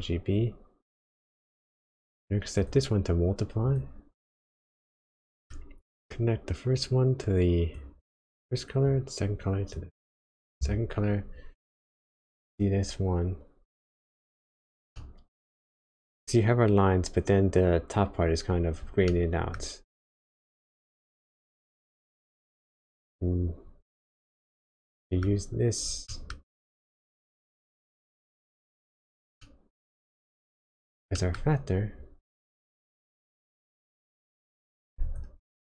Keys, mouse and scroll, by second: 1.4 middle click, 2.0-2.5 scroll up 1, 2.5 click, 4.2 click, 5.3 middle click, 5.6 scroll up 1, 6.7 click, 8.8 click, 12.0 ctrl+shift+click, 15.0 middle click, 15.6-16.5 scroll up 1, 19.1 middle click, 20.3 click, 24.7 click, 24.7 middle click, 26.1 middle click, 26.5-27.1 scroll up 1, 27.3 click, 29.4 middle click, 30.7-31.1 scroll down 2, 31.1 middle click, 31.4-32.5 scroll up 2, 32.5 click, 35.1 ctrl+shift+click.